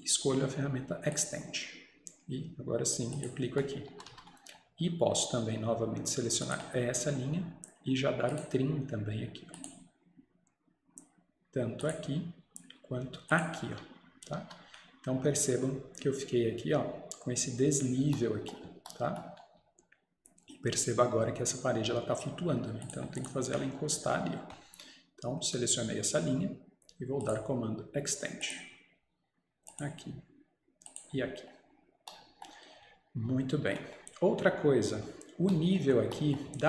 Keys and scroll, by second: 4.0 Escape, 4.2 Escape, 14.5 Escape, 33.7 Escape.